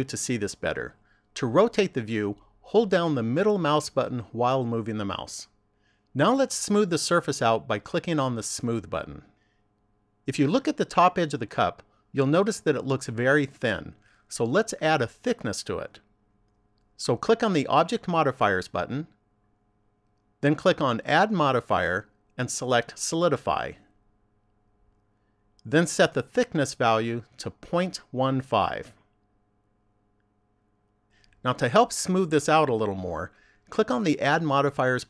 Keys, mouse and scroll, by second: 1.8 middle click, 8.4 click, 18.5 click, 20.4 click, 26.8 click, 34.6 click.